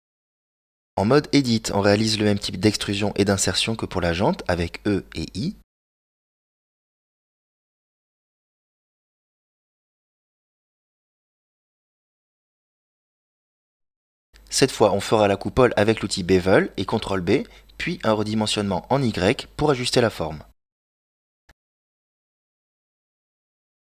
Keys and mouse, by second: 0.3 click, 1.3 Tab, 3.2 click, 4.2 right click, 5.1 KP_Decimal, 7.1 i, 15.1 ctrl+b, 20.7 s.